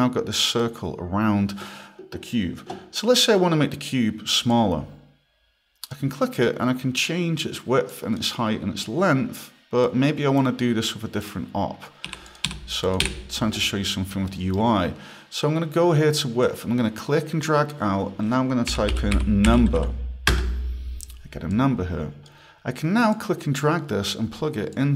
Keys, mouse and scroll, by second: 3.9 click, 4.5 click, 7.1 click, 7.9 click, 8.8 click, 11.2 click, 12.1-13.0 typing, 12.3 click, 12.8 click, 13.9 scroll, 14.3 right click, 16.4 click, 18.4-20.5 typing, 21.5 click, 23.1 click, 24.7 click.